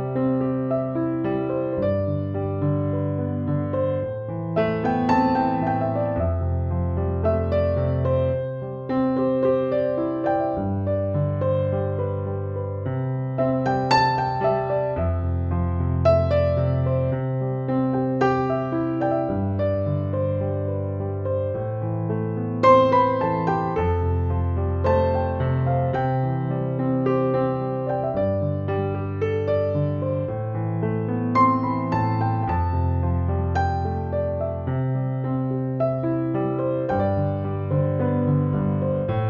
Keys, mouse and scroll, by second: 0.0-2.8 typing, 4.5 click, 6.3-7.9 drag, 11.2 click, 17.4 click, 19.8 alt+click, 24.2-30.4 drag, 29.5 shift+drag, 30.4-31.4 drag.